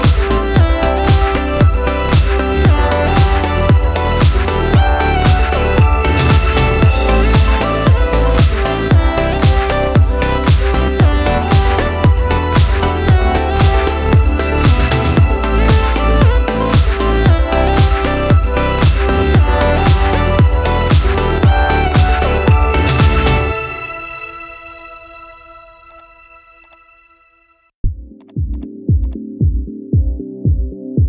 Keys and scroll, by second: 27.2 ctrl+g, 30.0 shift+Down.